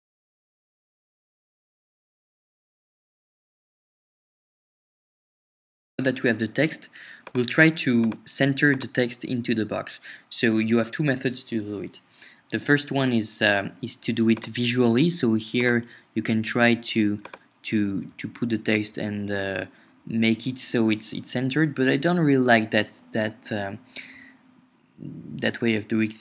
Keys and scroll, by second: 0.0 super+Tab, 0.7-2.6 typing, 4.7 Up, 5.4 shift+super+3, 18.0 Right, 19.4 Left, 21.0 Up, 21.4 Right.